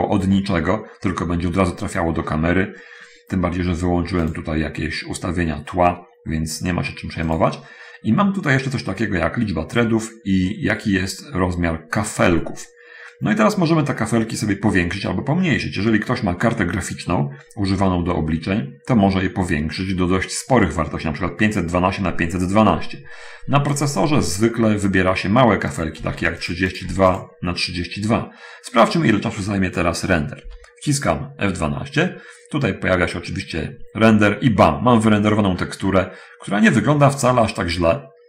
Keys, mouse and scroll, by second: 4.0-4.8 drag, 5.8-7.2 scroll up 1, 7.2-7.8 drag, 8.6-9.0 scroll up 1, 26.0 click, 26.3 3, 26.4 2, 26.6 click, 27.0 3, 27.2 2, 27.4 click, 30.8 F12, 32.4 scroll down 1, 35.5-36.4 scroll up 1, 36.4-38.2 scroll down 2.